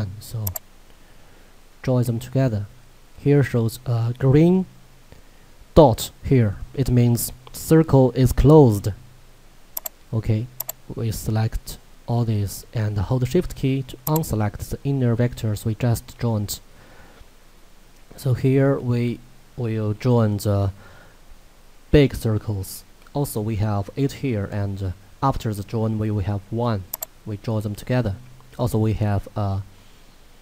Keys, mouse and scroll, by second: 0.5 click, 9.8 click, 14.1 shift+click, 26.9 click.